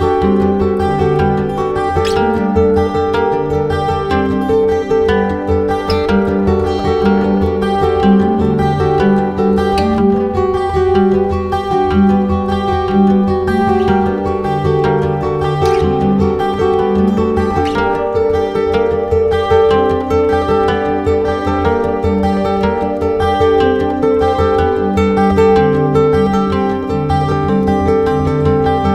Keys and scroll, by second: 5.0 space, 9.0 space, 15.5 space, 17.1 space, 20.3 space, 22.9 space.